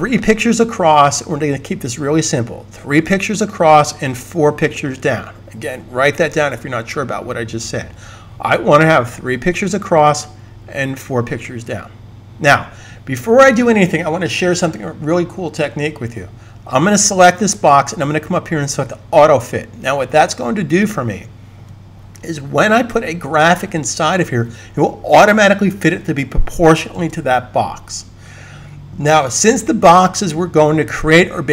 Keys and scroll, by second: 26.7 super+s.